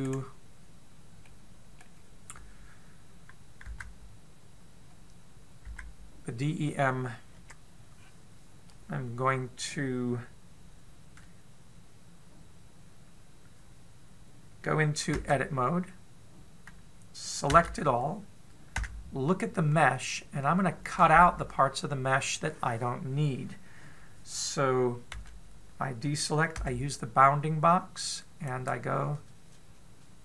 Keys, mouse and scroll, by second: 0.9 right click, 2.0 middle click, 4.5 Tab, 6.6 Tab, 8.2 KP_7, 8.8-9.6 scroll down 2, 16.0 Tab, 18.3 a, 19.6 z, 20.5-21.2 scroll up 3, 21.2-21.7 scroll down 2, 25.9 a, 27.3 b.